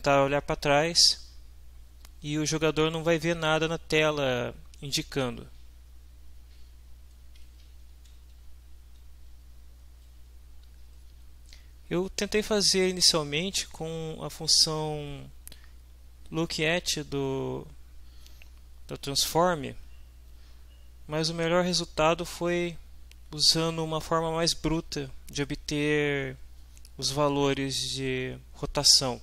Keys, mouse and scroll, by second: 7.4 Down, 7.8 Home.